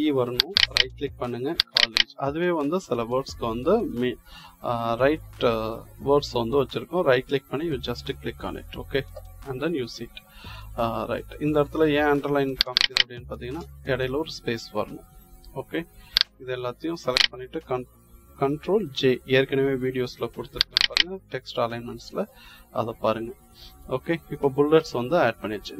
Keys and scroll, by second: 13.4 space, 18.7 ctrl+j.